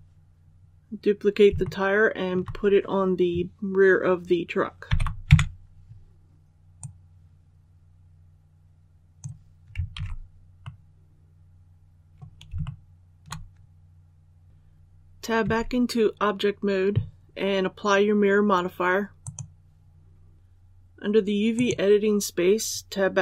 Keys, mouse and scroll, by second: 0.5 scroll down 1, 1.5 shift+middle click, 4.8 shift+d, 6.7-9.6 drag, 9.8 alt+a, 10.5-12.4 middle drag, 12.5 shift+middle click, 14.4 alt+a, 15.3 Tab, 19.1 click, 20.3 Tab, 21.4 click.